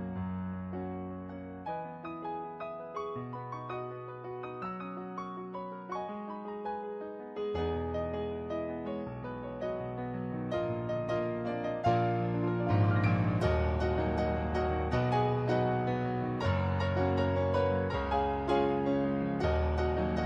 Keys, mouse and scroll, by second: 0.5 ctrl+z, 1.3 ctrl+z, 2.9 ctrl+z, 3.3 ctrl+z, 11.3 ctrl+z, 11.8 ctrl+z, 12.7 ctrl+z, 13.8 ctrl+z, 14.6 ctrl+z, 14.9 ctrl+z, 16.1 ctrl+z, 18.8 ctrl+z, 19.8 ctrl+z.